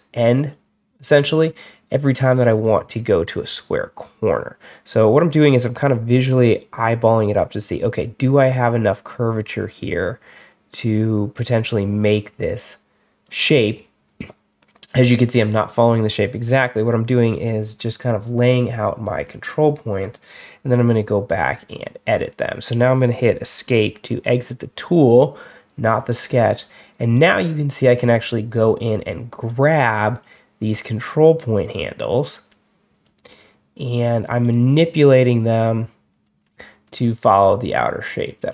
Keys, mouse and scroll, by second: 0.3 click, 2.4 click, 5.1 click, 8.1 click, 11.9 click, 13.1 click, 16.3 click, 17.2 click, 18.3 click, 19.1 click, 21.4 click, 23.6 Escape, 24.9-27.0 drag, 27.9-29.3 drag, 30.1-32.2 drag, 32.9-34.3 drag, 35.1-36.1 drag.